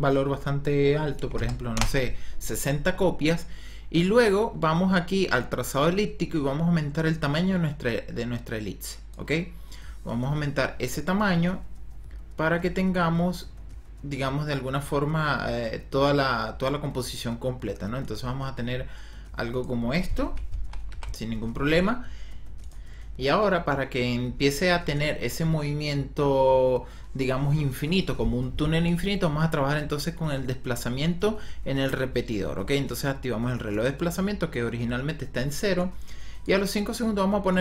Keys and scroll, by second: 1.1 KP_6, 1.4 KP_0, 2.1 Return, 20.5 End, 20.8 Home.